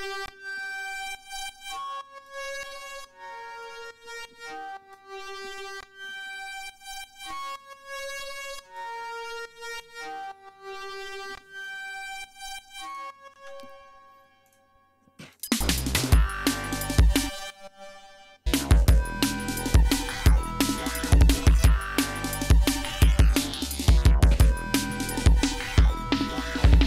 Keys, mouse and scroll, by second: 0.2 click, 2.2 click, 2.6 click, 3.5 right click, 3.8-5.0 drag, 5.4 click, 6.0 click, 7.1-8.9 drag, 9.7-11.8 drag, 12.8 click, 13.5 space, 14.4 click, 15.2 click, 15.4 space, 15.9 ctrl+scroll up 2, 16.9 click, 17.2 click, 18.4 click, 26.7 ctrl+scroll down 2.